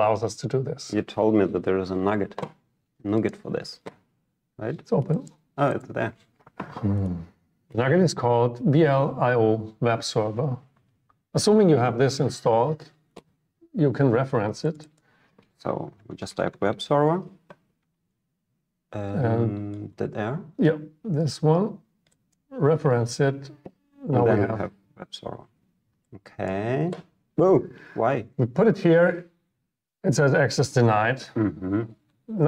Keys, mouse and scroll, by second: 3.4 click, 14.8 click, 22.4-24.6 drag, 26.5-28.8 drag.